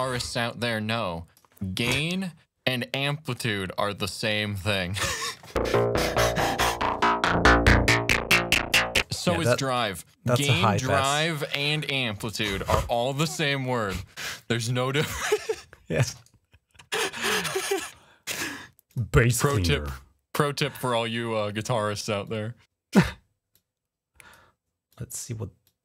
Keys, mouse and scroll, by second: 0.5 click, 1.2 right click, 2.9 click, 6.3-8.6 drag, 9.3 click, 10.4 click, 11.6 click, 18.7 click, 19.4 click, 22.0 click, 23.4 click, 24.2 right click, 24.8 click, 25.0 right click, 25.5-25.8 drag.